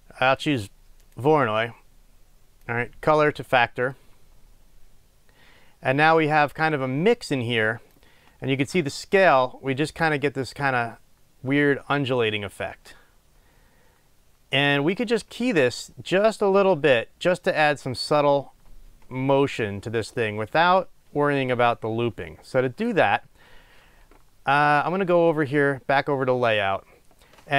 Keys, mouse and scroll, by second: 4.1-26.7 drag.